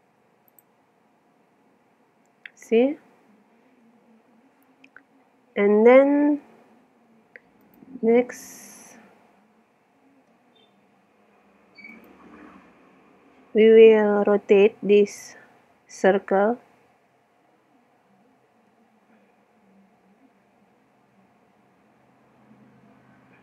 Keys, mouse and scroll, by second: 1.6 z, 2.5 middle click, 2.8-4.9 middle drag, 5.1 middle click, 6.4 KP_7, 7.6-9.3 drag, 9.3-10.5 middle drag, 10.8 Tab, 11.8 middle click, 11.9-13.5 drag, 13.7 click, 18.7 r.